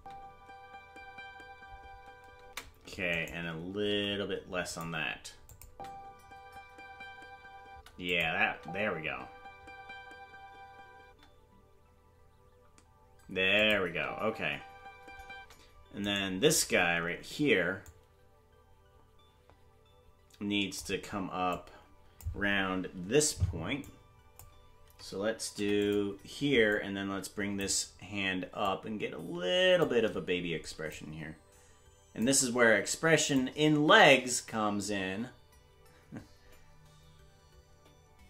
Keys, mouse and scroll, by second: 3.1 right click, 3.1 space, 3.8 g, 5.4 click, 5.6 space, 8.0 click, 8.0 space, 8.4 space, 12.1 space, 13.5 click, 13.8 space, 16.2 right click, 16.2 space, 17.8 click, 21.5 click, 23.8 click, 25.5 i, 26.7 click, 28.6 click, 30.9 shift+click, 33.3 click.